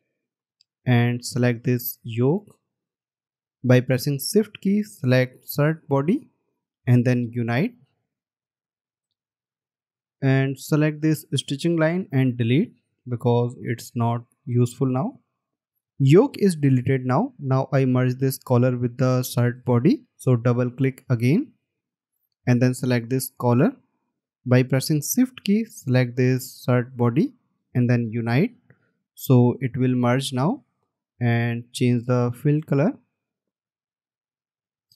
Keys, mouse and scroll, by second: 6.1 shift+click, 12.7 Delete, 21.7 double click, 25.7 shift+click.